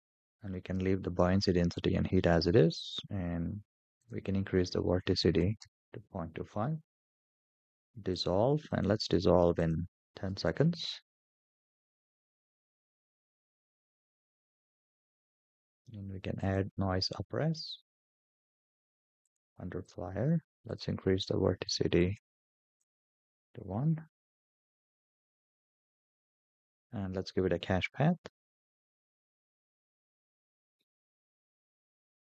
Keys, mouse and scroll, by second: 2.0-3.2 scroll down 2, 3.8-5.5 drag, 8.0 click, 9.4-10.6 drag, 12.5-13.9 scroll down 4, 15.2 click, 16.8 click, 17.6-19.0 scroll down 4, 19.0 click, 20.4-22.7 drag, 28.7-32.3 scroll down 6.